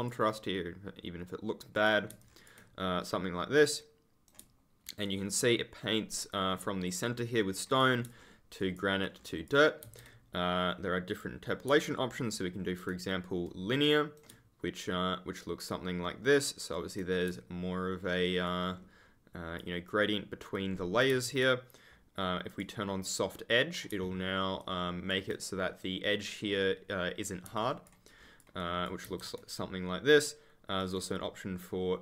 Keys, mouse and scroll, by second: 1.7 click, 2.1 ctrl+click, 2.2-3.0 ctrl+scroll down 1, 3.0 right click, 5.0 ctrl+click, 5.1-6.2 ctrl+scroll up 1, 6.4-7.0 ctrl+scroll up 1, 7.0 ctrl+scroll down 1, 8.0 ctrl+click, 8.1-8.5 scroll up 1, 8.5-8.9 scroll down 1, 9.1-9.4 scroll down 1, 9.8 ctrl+z, 11.0 click, 11.8 ctrl+click, 11.8-12.3 scroll down 1, 12.3 scroll up 1, 14.7 ctrl+click, 14.8-15.7 scroll up 1, 18.4 ctrl+click, 18.6 scroll up 1, 20.6-21.0 scroll down 1, 21.0 ctrl+z, 22.4 click, 23.0 right click, 24.5 ctrl+click, 24.6-25.2 scroll up 1, 27.5 ctrl+click, 28.1 scroll down 1, 28.5 ctrl+click, 28.6-29.0 ctrl+scroll up 1, 29.0 ctrl+z, 30.7 click.